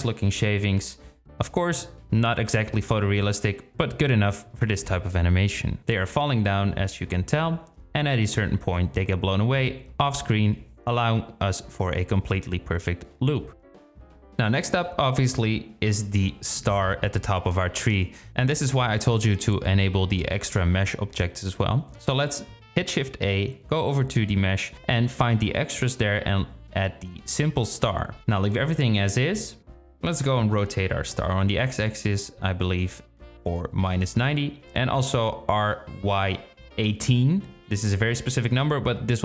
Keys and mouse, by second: 11.2 space, 16.5 click, 17.2-20.7 drag, 21.2 shift+a, 29.6 r, 34.3 r, 37.5 g.